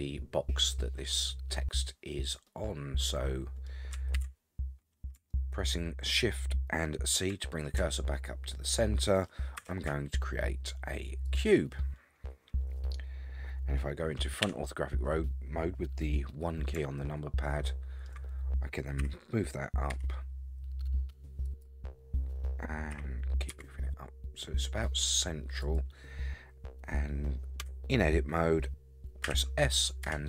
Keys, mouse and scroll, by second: 2.5-3.7 middle drag, 4.1 shift+c, 4.7 scroll up 5, 5.3-7.3 shift+middle drag, 7.5 scroll up 2, 8.0-9.2 shift+middle drag, 9.6 shift+a, 14.4 KP_1, 17.0-18.1 shift+middle drag, 19.0 g, 21.8 scroll down 4, 22.7 scroll down 2, 22.9 g, 27.6 Tab, 29.2 s.